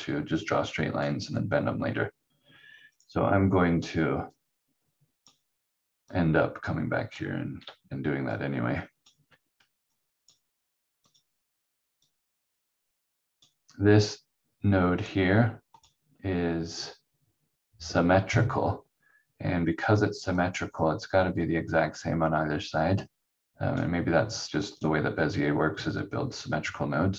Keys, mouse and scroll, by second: 2.9 click, 7.6 q, 8.3 click, 9.9 click, 20.3 click.